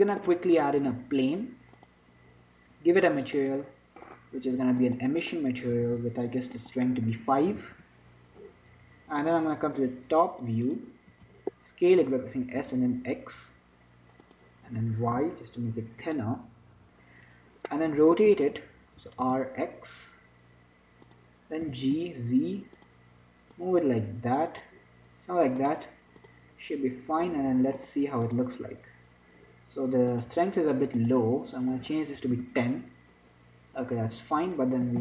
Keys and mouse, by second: 1.0 shift+a, 3.5-8.9 drag, 11.0 click, 11.4 z, 12.5 s, 15.8 s, 18.0-21.1 drag, 18.6 z, 19.3 r, 22.5 g, 23.8-25.9 drag, 26.5-27.8 drag, 27.8 middle click, 28.1-33.1 drag, 34.9-35.0 middle drag.